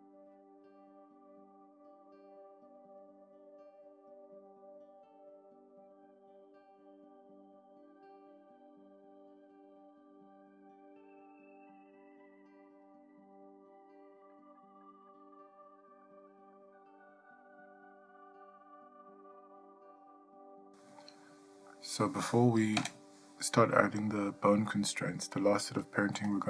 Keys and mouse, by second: 0.1 click, 1.7 shift+middle click, 1.8 middle click, 1.9 shift+middle click, 1.9 middle click, 2.0 shift+middle click, 2.1 middle click, 2.1 shift+middle click, 2.4 click, 2.8 KP_7, 3.0 shift+middle click, 3.1 shift+middle click, 3.7 ctrl+middle click, 4.2 ctrl+middle click, 4.2 shift+middle click, 5.2 middle click, 5.3 ctrl+middle click, 5.5 click, 6.4 click, 6.9 click, 7.7 middle click, 7.7 shift+middle click, 7.9 click, 8.3 click, 8.9 click, 9.0-11.6 typing, 9.5 click, 9.8 click, 10.1 click, 10.5 shift+middle click, 10.6 ctrl+middle click, 10.7 click, 11.3 click, 11.9 ctrl+middle click, 12.0 middle click, 12.2 click, 12.4 shift+middle click, 12.5 ctrl+middle click, 12.7 click, 12.9-24.4 typing, 13.4 click, 13.9 click, 14.9 click, 15.2 click, 15.3 click, 15.3 Right, 15.7 click, 16.4 click, 16.9 click, 17.4 click, 17.9 click, 18.4 shift+middle click, 18.5 shift+middle click, 18.6 shift+middle click, 18.7 middle click, 18.9 click, 19.4 click, 20.1 click, 21.0 click, 21.4 click, 22.2 click, 22.6 click, 23.1 click, 23.7 click, 24.0 click, 24.1 click, 24.9 ctrl+middle click, 25.1 shift+middle click, 25.1 middle click, 25.2 shift+middle click, 25.8 middle click, 25.8 shift+middle click, 25.9 middle click, 25.9 shift+middle click, 26.0 shift+middle click, 26.1 ctrl+middle click, 26.2 shift+middle click.